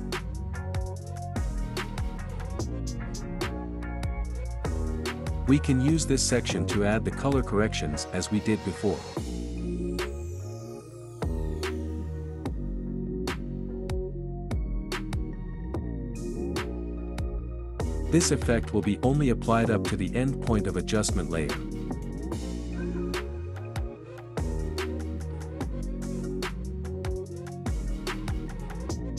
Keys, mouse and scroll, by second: 1.4-4.2 drag, 7.5-9.4 scroll down 1, 9.4-11.3 drag, 11.3 scroll down 1, 12.6-19.0 drag, 19.0-22.7 scroll down 1, 22.7-29.1 drag.